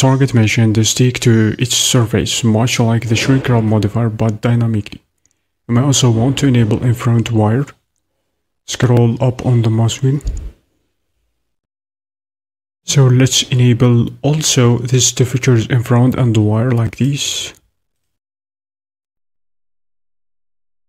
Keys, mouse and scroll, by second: 18.2 click, 19.1 click, 19.8 click.